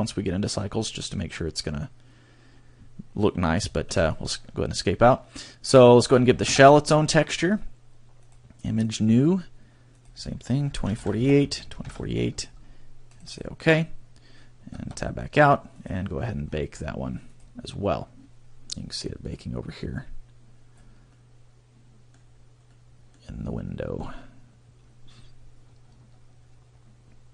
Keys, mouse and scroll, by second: 9.2 Escape, 11.8 Tab, 13.5 click, 18.7 click, 20.1 Tab, 21.0 click, 21.5-22.2 scroll down 11, 22.5 click, 25.1 click, 26.5 middle click.